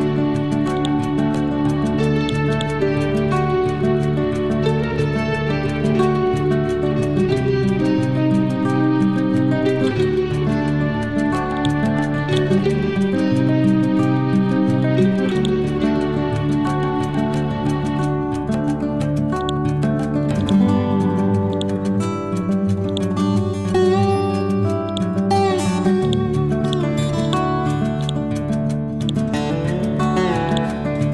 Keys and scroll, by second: 0.9 Right, 3.2 Down, 4.0 Right, 7.5 Down, 8.6 Up, 9.2 Left, 13.3 Up, 14.1 Down.